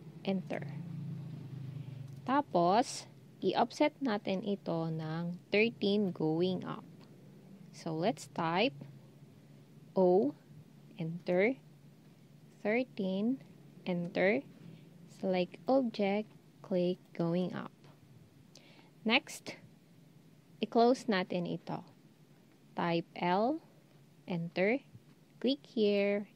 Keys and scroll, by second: 9.9 0, 12.4-13.1 typing, 22.9 l.